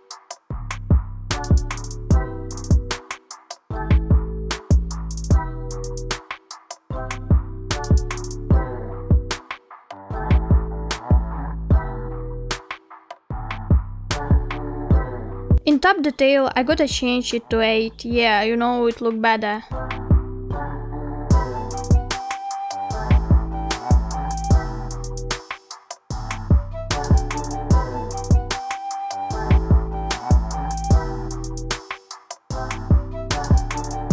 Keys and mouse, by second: 6.0-8.1 middle drag, 9.0-12.7 middle drag, 13.2-14.6 middle drag, 16.4-19.2 drag, 23.4-26.9 drag, 28.5-29.6 middle drag, 29.7-31.6 middle drag, 32.6-33.5 middle drag.